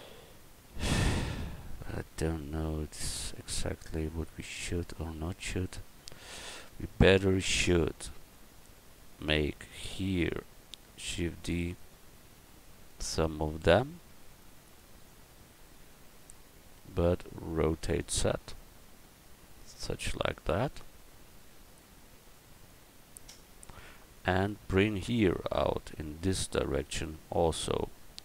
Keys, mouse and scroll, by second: 2.1-4.8 middle drag, 7.9 Tab, 11.0 shift+d, 15.1 middle click, 16.0 middle click, 16.6-18.6 middle drag, 17.7 r, 20.7-22.7 drag.